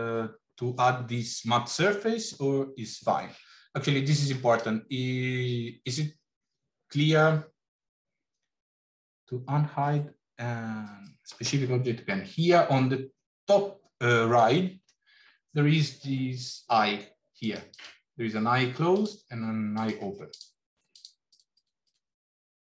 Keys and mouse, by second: 17.4 click, 18.8 click, 19.7 click, 20.8 click, 21.2 click, 21.5 click, 21.7-22.6 drag.